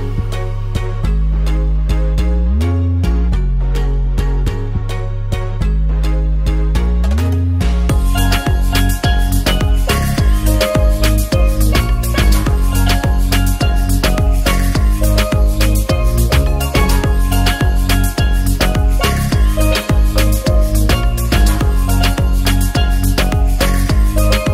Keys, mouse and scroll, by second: 0.8 click, 1.3 click, 3.8 click, 5.3 click, 6.2 alt+middle drag, 6.7 ctrl+s, 7.4 shift+a, 7.5 shift+middle drag, 7.9 shift+a, 11.5-12.1 ctrl+alt+drag, 13.6-13.9 alt+middle drag, 14.5 alt+middle click, 15.3 Delete, 15.6 click, 16.4 KP_0, 18.4-18.9 drag, 20.0 shift+middle click, 20.0 shift+a, 20.6 q, 21.4 shift+a, 21.5 shift+middle click.